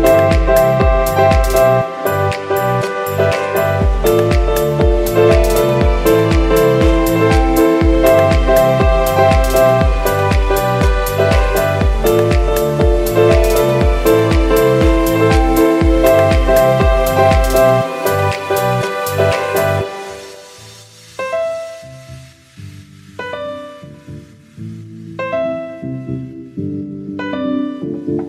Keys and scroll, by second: 1.9 alt+Page_Up, 2.2 Page_Down, 4.6 alt+Page_Up, 4.8 Page_Down, 8.1 alt+Page_Up, 8.3 Page_Down, 10.2 alt+Page_Up, 10.5 Page_Down, 13.3 alt+Page_Up, 13.6 Page_Down, 15.5 alt+Page_Up, 15.9 Page_Down, 17.7 z, 18.3 v, 20.5 super+x, 24.8 v.